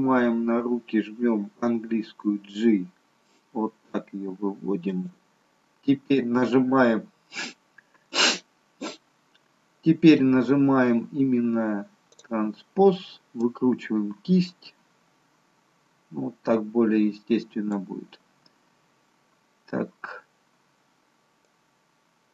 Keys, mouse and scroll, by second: 2.1 g, 12.1 click, 13.9 click, 21.4 click.